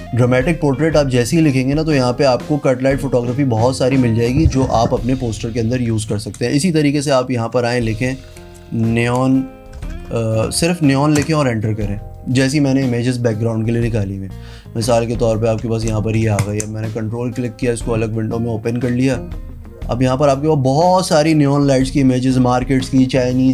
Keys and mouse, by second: 7.4 ctrl+a, 7.7-10.6 typing, 11.2 Return, 16.4 ctrl+click, 17.3 click.